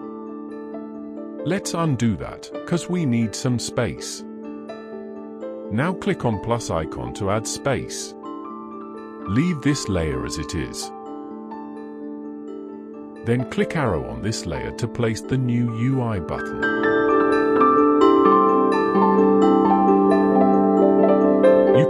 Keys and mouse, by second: 3.5 ctrl+z, 5.3 click, 20.0 click.